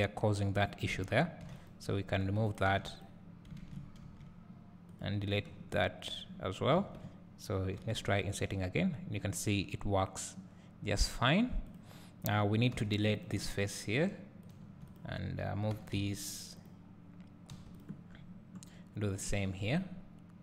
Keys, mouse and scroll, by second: 0.0 shift+click, 2.6 click, 3.7 ctrl+z, 5.0 x, 5.5 scroll down 1, 6.8 a, 12.8 3, 13.3 click, 14.5 x, 14.7 2, 15.0 click, 15.8 g, 17.5 3, 17.8 click, 18.1 scroll down 1, 19.3 click.